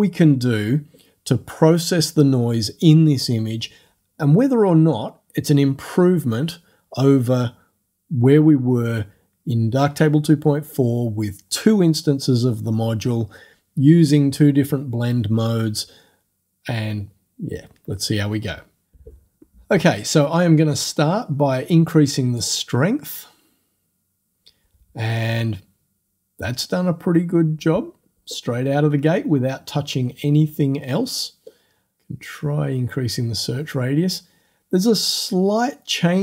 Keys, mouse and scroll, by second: 22.4 click.